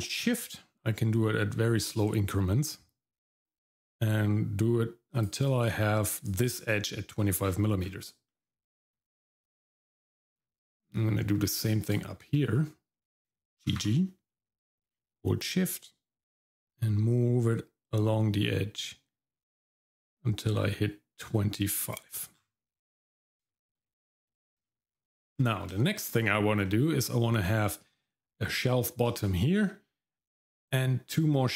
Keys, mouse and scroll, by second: 6.2 click, 7.4-8.3 scroll down 3, 8.3 middle click, 8.9-9.2 scroll down 1, 9.2 middle click, 9.9 middle click, 10.3-10.7 scroll up 2, 10.7 middle click, 11.8 alt+click, 12.3 middle click, 13.6 g, 22.3-22.7 scroll down 2, 22.7 middle click, 23.5 shift+middle click, 23.8 middle click, 24.2-24.6 scroll up 2, 24.6 shift+middle click, 25.3 scroll down 1, 25.8 shift+middle click, 26.1 scroll up 1, 26.6 middle click, 29.1 middle click, 29.5-31.5 scroll down 1.